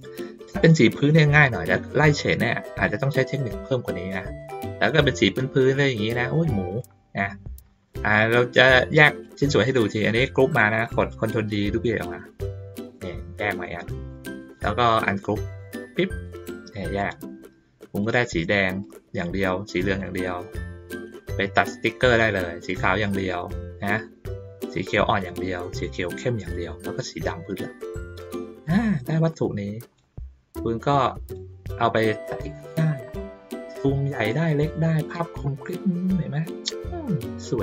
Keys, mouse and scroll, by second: 1.4 middle click, 4.0 middle click, 5.2 middle click, 6.4 middle click, 7.8 click, 9.2-10.6 drag, 11.9-13.8 drag, 14.1 middle click, 15.4 click, 16.1 click, 17.0-18.0 drag, 18.8-20.0 drag, 21.1-22.7 drag, 23.9-25.2 drag, 25.8 click, 26.8 click, 28.2-28.6 drag, 29.3-29.9 drag, 30.5-31.3 drag, 31.8 ctrl+middle click, 32.9 ctrl+middle click, 33.2 ctrl+middle click, 34.7 ctrl+middle click, 35.3 ctrl+middle click, 36.3 ctrl+middle click, 36.5 ctrl+middle click, 37.3 ctrl+middle click.